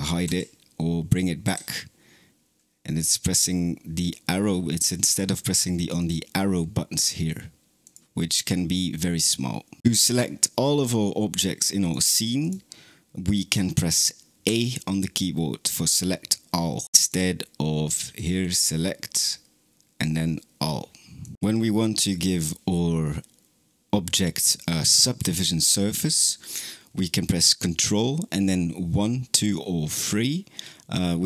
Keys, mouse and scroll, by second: 0.1 t, 1.3 t, 5.8-9.8 drag, 9.9 click, 11.7 click, 12.3 click, 14.3 a, 16.9 click, 18.3-21.3 drag.